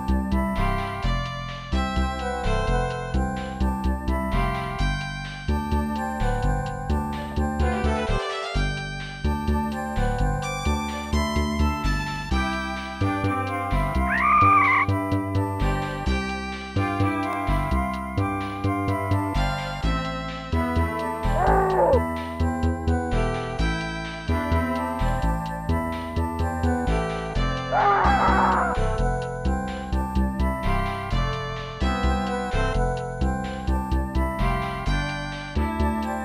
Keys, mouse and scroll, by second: 1.9 click, 3.4 click, 3.5 click, 3.9 scroll up 1, 5.7 click, 6.9 click, 8.0 click, 8.2 click, 9.0 click, 11.0 click, 11.1 click, 12.2 scroll down 1, 13.3 click, 14.2 click, 14.9 click, 15.0 click, 15.1 click, 15.2 double click, 15.2 double click, 15.3 double click, 15.5 double click, 15.5 double click, 15.6 double click, 16.1 click, 16.2 click, 16.4 click, 16.5 double click, 16.5 double click, 16.6 double click, 16.8 double click, 16.8 double click, 16.9 double click, 17.0 double click, 17.1 double click, 17.2 double click, 17.3 double click, 17.8 click, 17.9 click, 18.2 click, 18.2 click, 18.4 click, 18.5 double click, 18.6 double click, 18.7 double click, 18.7 double click, 18.8 double click, 19.4 double click, 19.5 click, 19.7 click, 19.8 click, 20.5 ctrl+s, 20.7 click, 20.8 click, 21.2 Tab, 21.6 click, 21.7 click, 22.3 ctrl+s, 22.5 click, 22.6 click, 23.6 click, 23.8 click, 24.3 click, 24.4 click, 31.2 ctrl+s, 31.4 click, 33.0 click, 33.9 click.